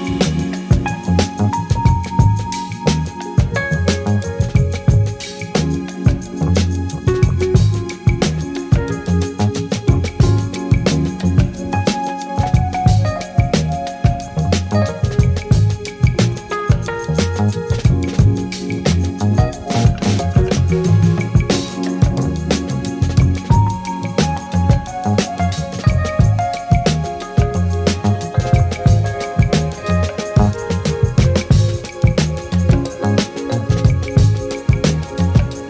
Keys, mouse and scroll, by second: 0.0 click, 0.1 middle click, 0.2 middle click, 0.2 ctrl+click, 0.5 middle click, 0.6 ctrl+click, 0.7 click, 0.8 ctrl+click, 1.1 shift+click, 1.2 click, 1.2 middle click, 1.7 ctrl+click, 1.9 middle click, 2.3 ctrl+middle click, 2.4 ctrl+click, 2.9 middle click, 3.0 ctrl+click, 3.4 shift+middle click, 3.7 shift+click, 4.3 middle click, 4.4 middle click, 4.6 click, 4.8 ctrl+alt+Page_Up, 4.9 middle click, 5.2 f, 5.2 click, 5.3 f, 5.3 click, 5.5 shift+click, 5.7 middle click, 5.8 shift+click, 5.8 middle click, 6.0 f, 6.1 f, 6.2 middle click, 6.2 click, 6.5 ctrl+click, 7.0 click, 7.2 shift+middle click, 7.2 click, 7.3 middle click, 7.3 click, 7.5 middle click, 7.6 f, 7.9 ctrl+z, 8.1 ctrl+click, 8.2 shift+click, 8.3 ctrl+click, 8.8 middle click, 8.9 click, 9.1 ctrl+click, 9.4 f, 9.5 click, 9.6 middle click, 9.7 f, 9.7 click, 10.1 middle click, 10.1 click, 10.3 middle click, 10.4 f, 10.5 middle click, 10.6 click, 10.6 f, 10.7 middle click, 10.9 ctrl+click, 11.0 click, 11.2 click, 11.4 click, 11.4 middle click, 11.6 click, 11.9 shift+middle click, 12.1 ctrl+middle click, 12.2 shift+click, 12.3 middle click, 12.4 shift+click, 12.5 middle click, 12.6 shift+click, 12.6 middle click, 12.7 ctrl+click, 13.1 ctrl+click, 13.4 click, 13.4 middle click, 13.6 ctrl+z, 13.9 click, 14.0 ctrl+click, 14.3 middle click, 14.3 ctrl+click, 14.5 middle click, 14.6 ctrl+click, 14.7 middle click, 15.0 middle click, 15.1 middle click, 15.3 f, 15.3 click, 15.4 middle click, 15.5 middle click, 15.8 click, 15.9 middle click, 16.1 click, 16.1 f, 16.1 ctrl+shift+middle click, 16.3 click, 16.4 middle click, 16.5 middle click, 16.6 click, 16.7 click, 16.8 ctrl+middle click, 17.0 click, 17.1 middle click, 17.3 click, 17.4 middle click, 17.5 middle click, 17.6 click, 17.7 middle click, 18.0 ctrl+z, 18.0 middle click, 18.2 click, 18.3 ctrl+click, 18.4 middle click, 18.5 ctrl+alt+Page_Up, 18.5 alt+click, 18.8 click, 19.0 ctrl+z, 19.0 click, 19.2 Delete, 19.3 Return, 19.4 ctrl+middle click, 19.6 ctrl+middle click, 19.7 click, 19.8 ctrl+z, 19.8 click, 21.0 click, 21.5 shift+middle click, 21.5 click, 22.1 middle click, 22.2 click, 22.3 middle click, 22.5 middle click, 22.6 click, 22.6 middle click, 22.7 click, 22.9 middle click, 23.2 click, 23.2 f, 23.5 middle click, 23.6 click, 23.7 middle click, 23.8 click, 24.2 shift+middle click, 24.4 click, 24.4 middle click, 24.6 click, 25.3 middle click, 25.5 middle click, 25.6 click, 25.7 middle click, 25.7 click, 26.0 ctrl+middle click, 26.0 click, 26.1 middle click, 26.2 click, 26.2 middle click, 26.3 click, 26.3 middle click, 26.4 click, 26.4 ctrl+middle click, 26.6 shift+middle click, 26.6 click, 26.9 middle click, 27.4 click, 27.6 middle click, 27.6 click, 27.9 click, 28.1 middle click, 28.1 click, 28.3 middle click, 28.4 click, 28.5 middle click, 28.6 click, 28.7 click, 28.9 middle click, 29.1 click, 29.2 ctrl+middle click, 29.3 click, 29.3 middle click, 29.4 click, 29.9 click, 30.2 middle click, 30.3 click, 30.4 middle click, 30.5 middle click, 31.1 middle click, 31.2 click, 31.3 click, 31.4 click, 31.6 click, 31.6 ctrl+z, 31.9 click, 32.4 middle click, 32.4 click, 32.5 click, 32.7 middle click, 32.8 click, 32.8 middle click, 32.9 click, 33.0 middle click, 33.1 click, 33.4 shift+middle click, 33.8 click, 33.9 middle click, 34.1 click, 34.3 click, 34.3 middle click, 34.5 shift+click, 34.8 ctrl+shift+middle click, 35.0 click, 35.3 click, 35.4 middle click, 35.4 click.